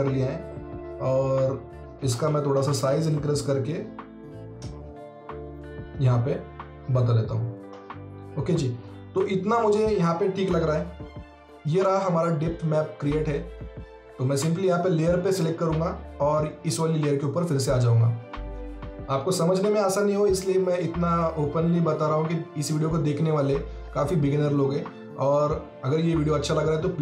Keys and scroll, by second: 2.1-2.7 typing, 4.7 ctrl+z, 10.7 x.